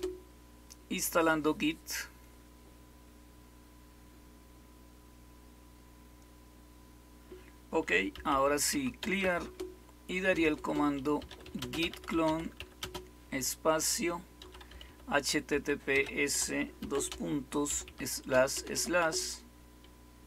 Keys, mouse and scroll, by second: 7.8-13.0 typing, 14.1-19.0 typing.